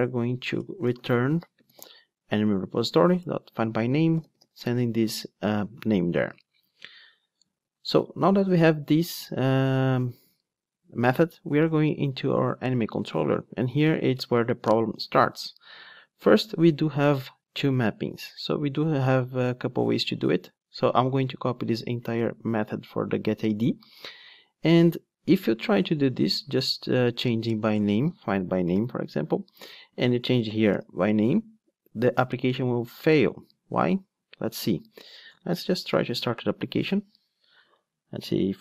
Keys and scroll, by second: 2.2 Return, 21.3 super+c, 23.4 super+v, 35.9 ctrl+d.